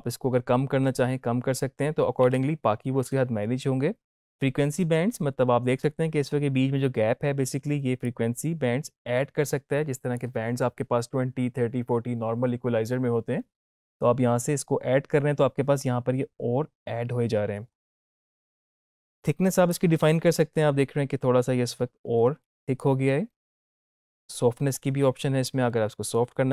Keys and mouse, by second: 8.0-12.4 drag, 19.7-26.5 drag.